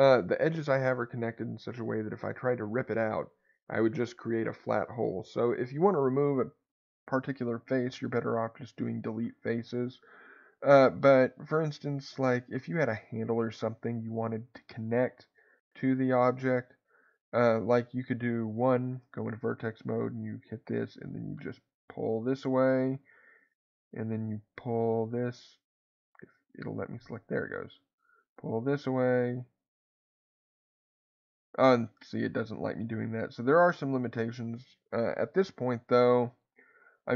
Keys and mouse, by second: 12.6 middle click, 18.7 1, 19.3 click, 20.8-22.4 drag, 23.0 click, 24.9 click, 27.0-28.2 drag, 28.9 click, 29.7 click, 30.3 click.